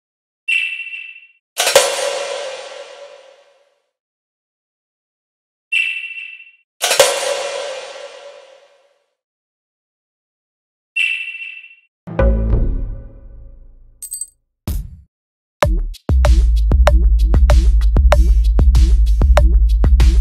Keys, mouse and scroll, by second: 0.4 click, 1.6-2.9 drag, 5.7 click, 7.1 click, 7.7 click, 8.9 click, 9.6 click, 10.4 click, 11.1 click, 13.8 click, 16.1 click, 16.3 click, 17.5 click, 17.7 click, 17.8 click, 18.0 click, 20.0 click.